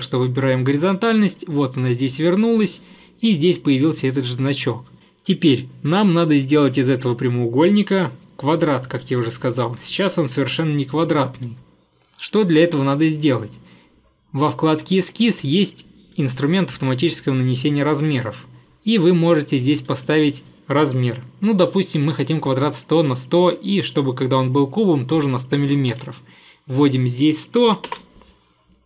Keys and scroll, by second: 25.2-25.6 typing, 28.0 Return.